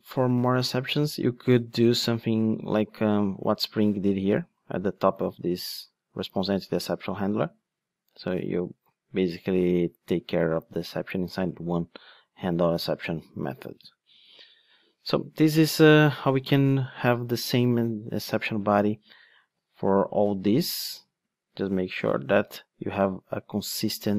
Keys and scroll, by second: 2.5 ctrl+Tab, 14.9 ctrl+Tab, 20.2 ctrl+`, 21.6 ctrl+Tab.